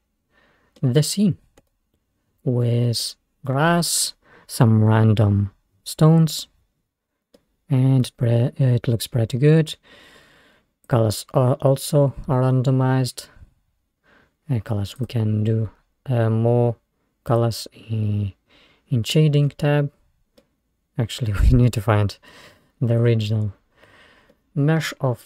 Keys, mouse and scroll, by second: 1.2-1.7 scroll up 2, 1.7-4.2 middle drag, 4.2-6.3 scroll up 7, 6.8-7.3 scroll down 5, 7.4-8.8 middle drag, 8.8-9.3 scroll down 2, 9.6-10.2 scroll up 2, 10.9 click, 15.5 click, 17.3 click, 19.0-20.3 scroll up 4, 20.3 scroll up 1, 20.4-23.0 middle drag, 23.0 click, 23.9-24.3 scroll down 3, 24.5-25.2 middle drag.